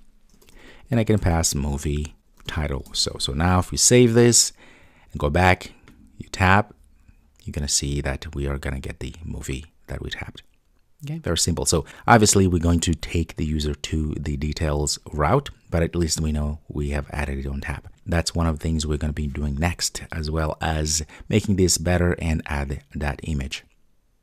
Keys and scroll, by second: 3.8 super+s, 7.0 super+s.